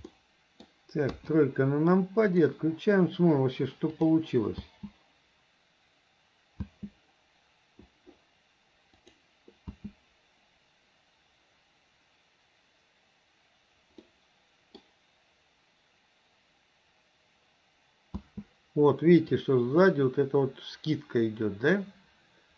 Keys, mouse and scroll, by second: 0.1-0.6 middle drag, 1.1 KP_3, 2.4 click, 3.9 click, 4.6 space, 6.6 space, 9.1 click, 9.7 space, 14.0-14.9 middle drag, 18.2 space, 19.4-22.5 drag.